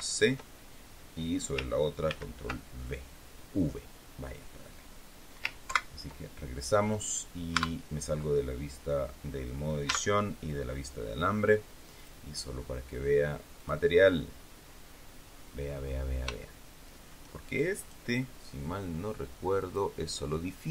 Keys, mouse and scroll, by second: 2.0 ctrl+v, 5.6 ctrl+Right, 7.4 Tab, 9.8 z, 11.9 click, 13.5 click, 14.9 scroll down 1, 15.8 scroll up 1, 16.3 shift+middle click, 17.7 right click, 19.5 click.